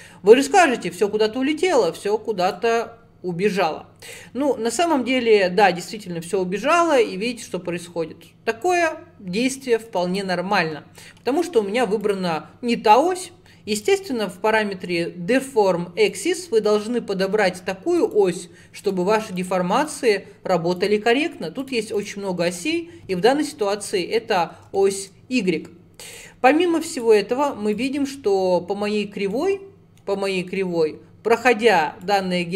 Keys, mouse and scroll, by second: 0.5-2.5 middle drag, 2.5 click, 3.1-4.2 scroll down 1, 4.2 click, 11.3-21.7 drag, 22.0-23.1 drag, 23.1-24.0 scroll up 13, 24.8-26.1 shift+middle drag, 26.1 click, 26.9 click, 27.8 click, 29.4-32.1 middle drag, 32.1 click.